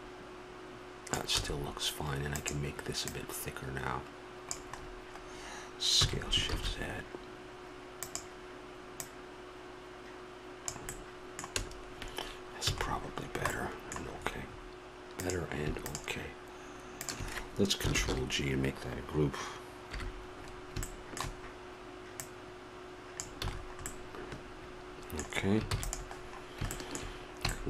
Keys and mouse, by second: 1.4 a, 3.8-4.9 drag, 5.9 s, 8.9-10.9 drag, 10.9-15.2 middle drag, 12.6 a, 15.2-17.9 drag, 17.9 ctrl+g, 19.9 KP_1, 22.1 middle click, 23.4 a, 23.9 middle click, 25.0 middle click, 25.7 ctrl+s, 26.2-27.6 middle drag.